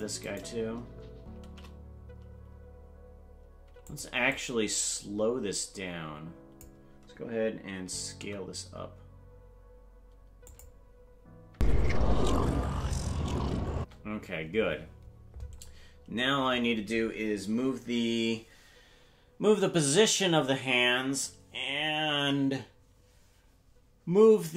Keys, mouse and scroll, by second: 1.4 shift+d, 4.4-6.7 drag, 8.2 s, 11.5 space, 13.8 space.